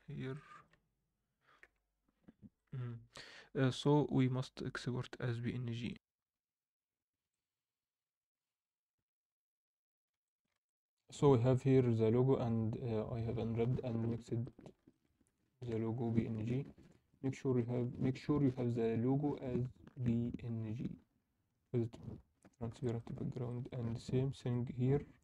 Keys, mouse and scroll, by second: 8.9 scroll up 2, 9.9 scroll down 1, 10.2 alt+shift+middle click, 10.6 alt+middle click, 11.1 scroll up 1, 11.5 alt+middle click, 20.7 scroll down 1, 20.9 middle click, 21.1-21.5 scroll up 2, 22.4 middle click, 22.4 scroll down 2, 22.9 alt+shift+middle click, 23.2 scroll down 1, 23.4 alt+middle click, 24.4 KP_7, 24.9-25.2 scroll up 2.